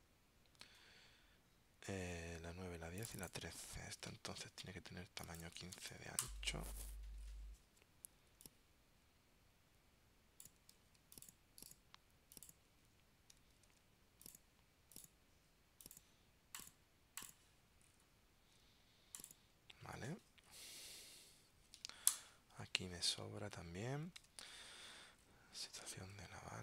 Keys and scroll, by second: 10.9 super+x, 13.8 super+v, 24.3 super+Tab, 26.2 super+Tab.